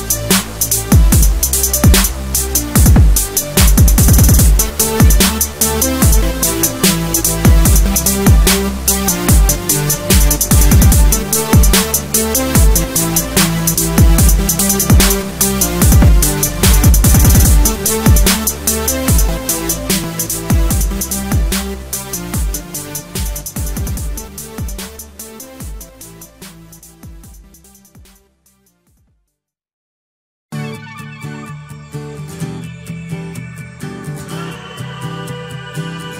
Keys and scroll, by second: 0.3 Escape, 1.3 Return, 3.6 Escape, 5.1 Return, 7.2 Escape, 7.3 alt+7, 7.5 Escape, 7.7 alt+a, 9.0 Return, 9.4 Escape, 13.9 Escape, 14.4 Delete, 15.0 Return, 15.2 Escape, 15.4 alt+a, 17.3 alt+7, 17.8 alt+a, 17.9 Escape, 19.4 Return, 19.6 Escape, 21.5 Return, 28.9 Return, 30.6 Escape, 30.8 alt+a, 31.0 Escape, 32.3 Return, 32.5 Escape.